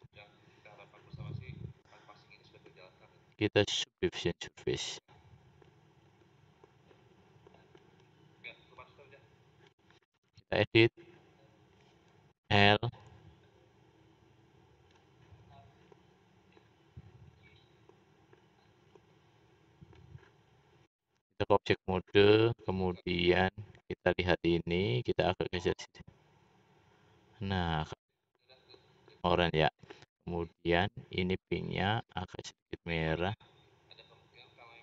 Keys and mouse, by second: 8.9-10.4 drag, 12.3 l, 18.4 typing, 23.0-23.9 middle drag, 24.0 middle click, 24.9-28.1 middle drag, 30.2 click.